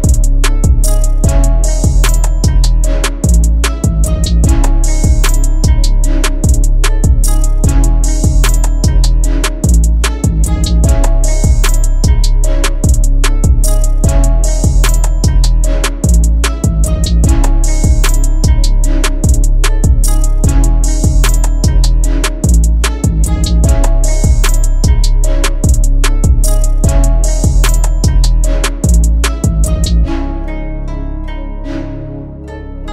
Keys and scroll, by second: 4.5 ctrl+shift+a, 7.9 space, 10.0 F4, 10.5 Escape, 13.7 shift+F2, 14.1 shift+Page_Up, 14.4 F3, 19.6 F4, 20.3 F2, 32.0 2.